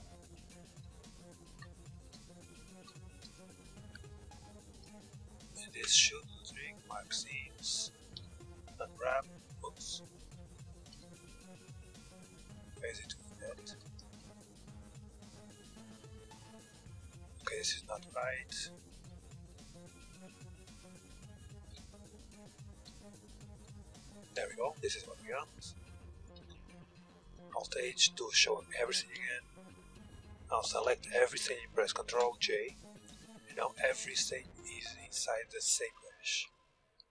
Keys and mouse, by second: 0.4 b, 1.7 b, 2.8 b, 4.4 b, 5.3 ctrl+e, 6.9 a, 7.0 a, 7.9 u, 9.3 click, 9.3 a, 9.7 a, 10.5 u, 11.9 click, 12.5 z, 13.6 z, 14.0 a, 19.0 b, 19.9 b, 20.4 b, 21.1 ctrl+e, 22.3 a, 22.5 a, 23.1 u, 25.6 a, 25.9 Tab, 26.9 alt+h, 28.7 KP_3, 29.1 a, 30.5 a, 31.7 ctrl+j, 33.0 a, 33.3 a, 34.6 z, 34.9 Tab, 35.7 a, 35.9 a.